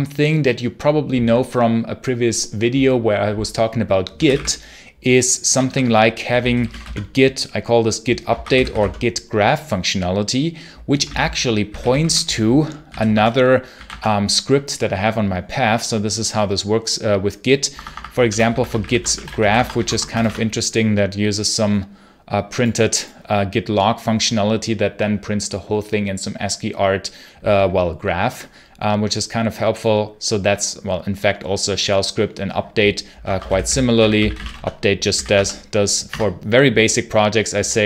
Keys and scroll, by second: 3.8-7.1 typing, 8.2 ctrl+c, 8.4 g, 8.6 space, 10.9 ctrl+c, 11.3-13.6 typing, 13.0 Tab, 13.7 Tab, 17.6 Escape, 17.8 Escape, 17.9-20.4 typing, 33.0-35.0 typing, 35.2 Tab, 35.9 Return.